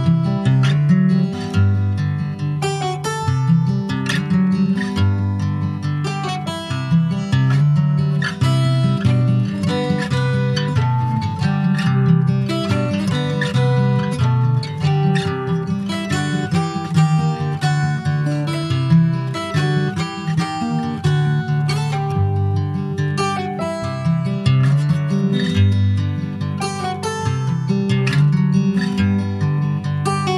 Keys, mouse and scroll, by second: 0.2 Tab, 1.0 Tab, 1.8 Tab, 2.2-3.6 middle drag, 3.6 2, 3.9 click, 5.5 x, 6.9 middle click, 7.4 Tab, 7.7-8.8 middle drag, 8.8 ctrl+z, 9.2 middle click, 9.4 ctrl+z, 9.9 middle click, 10.5 click, 12.0 middle click, 12.7 click, 15.5 click, 16.1 ctrl+s, 16.2 middle click, 16.5-16.9 scroll up 1, 16.9 middle click, 17.9 3, 18.0 click, 18.5 middle click, 19.3 3, 19.4 click, 19.6 `, 20.7 Tab, 20.9 click, 21.5 middle click, 22.2 3, 22.4 click, 22.9 ctrl+s, 23.0 middle click, 24.0 Tab, 24.4 ctrl+a, 25.6 click, 26.0 s, 27.3 click, 27.5-29.4 right drag, 29.4 middle click, 30.0 s.